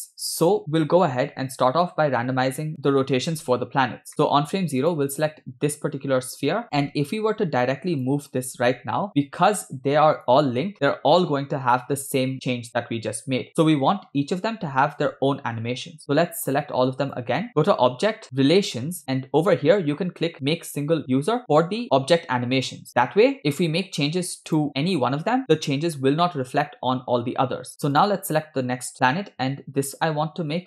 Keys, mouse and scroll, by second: 0.7 scroll up 3, 1.3 space, 2.7 click, 3.0 Left, 4.1 shift+middle click, 4.9 click, 8.0 click, 9.1 g, 10.7 space, 10.8 scroll down 2, 12.2 space, 13.5 ctrl+z, 14.1-14.6 scroll down 2, 16.0-17.3 drag, 17.6-22.9 drag, 24.6 click, 24.8 scroll up 2, 26.2-26.6 shift+middle drag, 28.1 click.